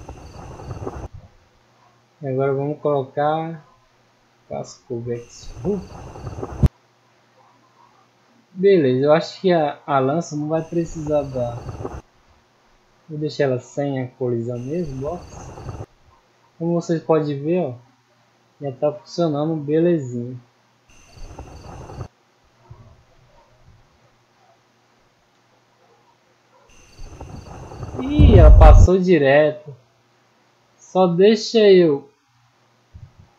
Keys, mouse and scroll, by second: 1.2 middle click, 2.2-3.1 scroll down 1, 3.1 click, 3.8 click, 6.7-7.2 middle drag, 8.0 right click, 9.2 click, 13.2 click, 13.7-14.1 middle drag, 16.7 middle click, 17.6-18.2 drag, 18.5-20.5 middle drag, 23.0-23.5 drag, 24.1 click, 26.2 click, 29.0 middle click, 29.8 middle drag, 30.2 middle click, 30.6 middle drag, 31.6 right click.